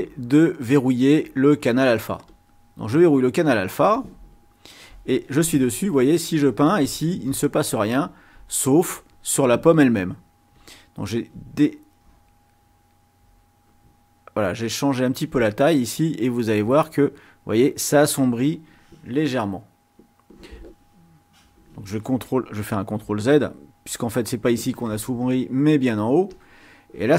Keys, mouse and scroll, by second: 2.3 click, 6.0-8.0 drag, 14.5 click, 16.3 click, 17.6 click, 22.9 ctrl+z, 23.8 ctrl+z, 26.2 click.